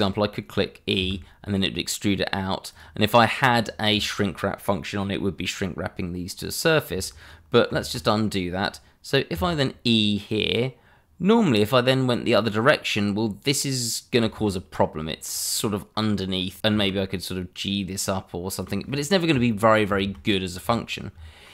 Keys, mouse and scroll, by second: 1.0 e, 2.7 click, 3.2 middle click, 7.7 ctrl+z, 9.3 e, 14.1 click, 14.5 middle click, 15.6-16.6 scroll up 1, 16.6 Escape, 16.7 g, 18.6 click, 18.8 middle click, 19.9 ctrl+z, 20.3 scroll down 1.